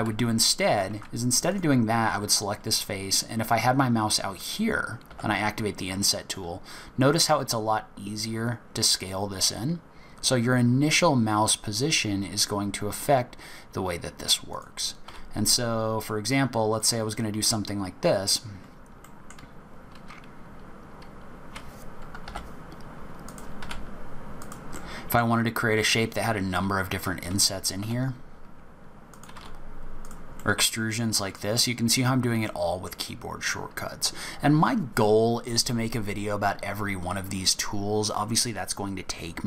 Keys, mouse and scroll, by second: 0.9 ctrl+z, 1.4 click, 15.0 e, 17.1 middle click, 17.7-18.0 scroll up 2, 18.7 scroll down 1, 19.0 middle click, 22.2 i, 23.6 e, 24.7 middle click, 24.7-25.3 scroll down 1, 27.8 i, 29.3 e, 30.4 middle click, 32.4 middle click, 33.0 scroll down 2, 33.4-35.5 scroll up 4.